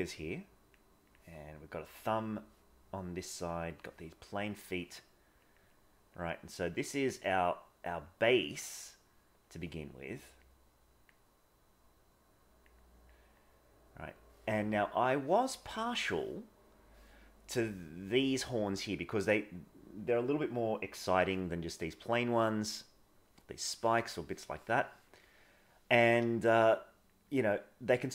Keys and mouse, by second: 0.2 click, 1.0 click, 3.2 click, 3.6 click, 4.4 middle click, 5.7 click, 6.2 click, 6.7-7.9 drag, 8.0 click, 10.5 click, 11.5-12.6 drag, 12.7 click, 13.4 click, 15.1 middle click, 16.0 middle click, 24.2 middle click, 24.8 middle click, 26.5 click, 26.9 click, 27.3 click, 27.7 click.